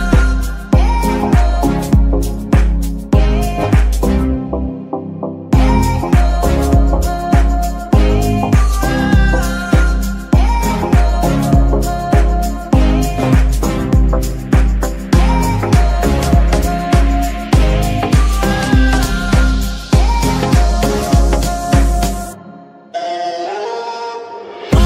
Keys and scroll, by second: 0.9 g, 1.2 Escape, 1.6 z, 2.1 z, 10.1 g, 10.3 e, 10.4 a, 10.5 r, 11.9-13.1 typing, 14.2-15.7 typing, 16.0 Return, 17.6 g, 19.3 Escape, 20.3 z, 21.0 Tab, 22.1 r, 22.7 Escape, 24.3 r, 24.5 x.